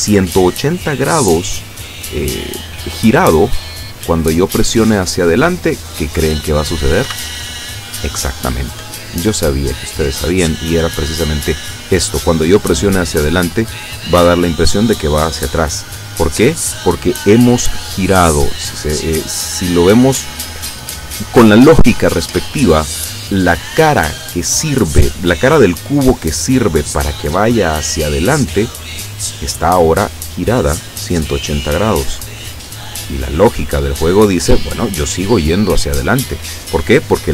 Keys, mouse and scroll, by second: 7.1 Up.